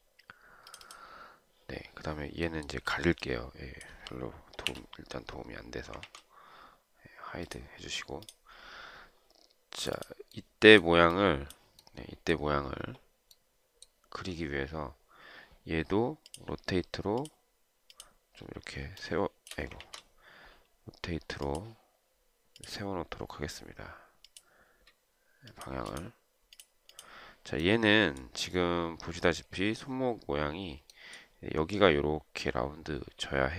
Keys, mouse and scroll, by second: 5.0 Delete, 6.3 ctrl+z, 19.2 shift+click, 20.1 ctrl+z, 25.5 shift+click.